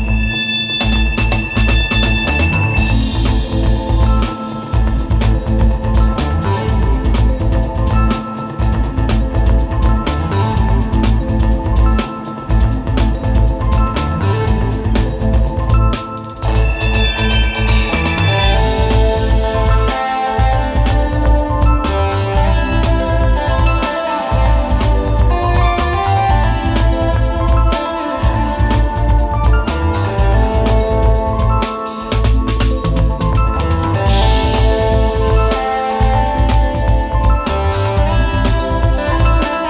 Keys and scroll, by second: 1.3 super+z, 5.7 super+], 6.0 super+[, 6.6 space, 7.5 super+[, 10.2 super+[, 14.2 space, 14.7 space, 17.7 super+z, 21.3 super+z, 23.5 space, 24.7 space, 25.6 space, 25.9 space, 26.1 space, 27.1 super+z, 28.3 super+Tab, 30.5 space, 34.9 super+z, 36.5 super+z, 39.4 super+space.